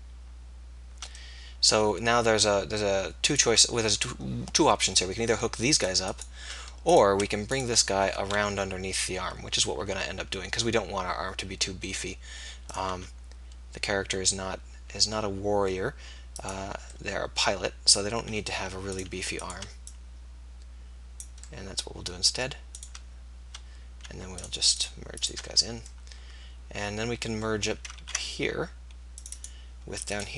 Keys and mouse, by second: 3.4-8.7 right drag, 8.7 KP_3, 9.9 e, 13.3 e, 18.2 middle click, 25.6 f, 28.3 ctrl+r.